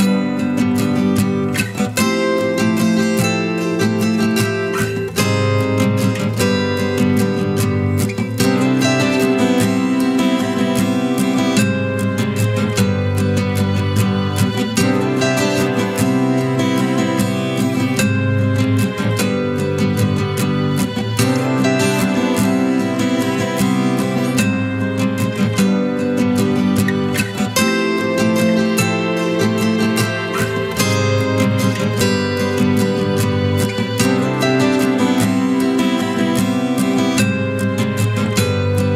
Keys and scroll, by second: 0.1 ctrl+a, 7.9 ctrl+KP_Subtract, 9.3 ctrl+KP_Subtract, 10.1 ctrl+t, 21.9 ctrl+KP_Add, 23.3 ctrl+t, 25.0 ctrl+KP_Subtract, 33.0 ctrl+KP_Add.